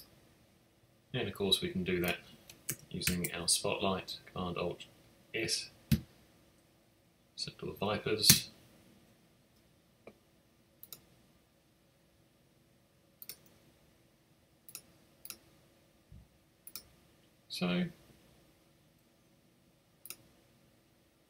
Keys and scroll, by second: 3.0 alt+shift+super+s, 8.2 Return.